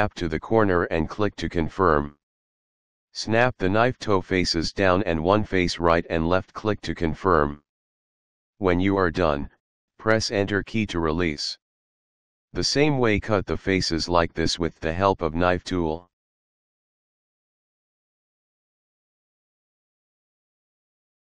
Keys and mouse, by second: 1.5 click, 5.9 click, 8.5 Return, 12.5 k, 14.6 click, 17.3 click, 19.0 Return, 21.1 k.